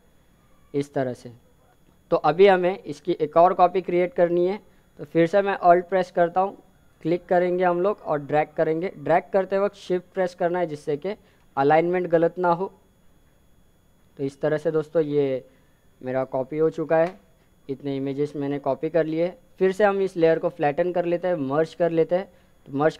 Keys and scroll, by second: 22.5 ctrl+e.